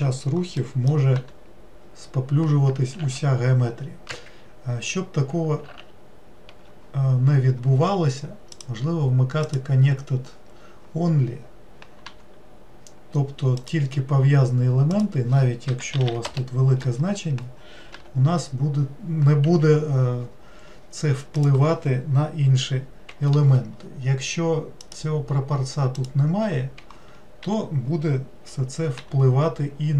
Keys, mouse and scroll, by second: 0.6 middle click, 1.2 g, 8.5-11.6 drag, 15.0-16.1 drag, 16.1 0, 21.4-24.4 drag, 24.8-28.0 drag.